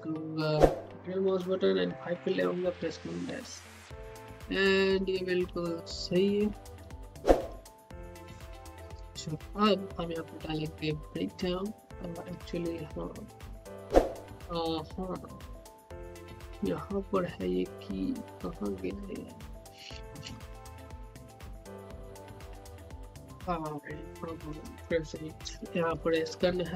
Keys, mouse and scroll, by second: 2.2-2.9 typing, 4.3-7.7 typing, 15.0-17.6 drag, 17.6 scroll down 1, 20.8 click, 21.1 scroll down 1, 21.5-24.4 drag, 25.4-26.4 typing.